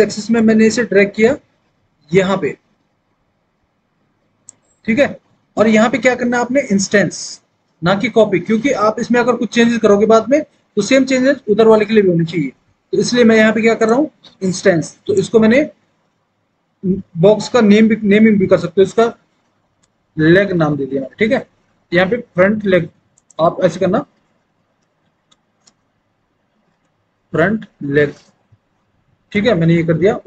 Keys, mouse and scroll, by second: 14.9 click, 19.9-20.6 typing, 24.7-25.7 typing, 26.8 space.